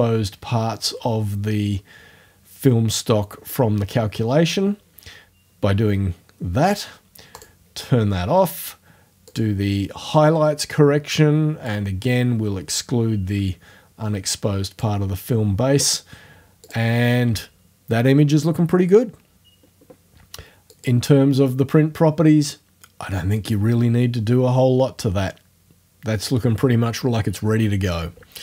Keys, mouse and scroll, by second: 3.7-7.4 middle drag, 7.4 click, 9.3 click, 11.7-16.0 drag, 16.7 click, 20.7-26.0 drag.